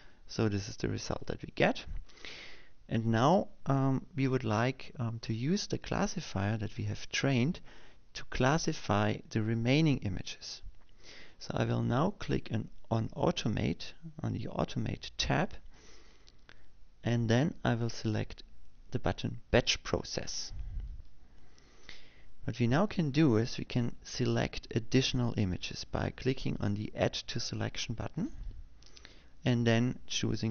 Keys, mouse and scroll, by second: 17.0 click, 22.6 click, 29.7 click.